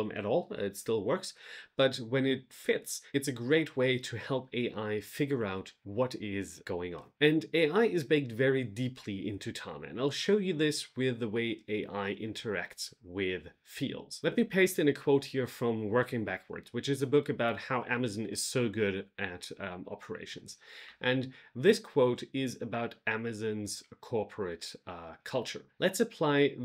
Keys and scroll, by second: 20.8 super+v.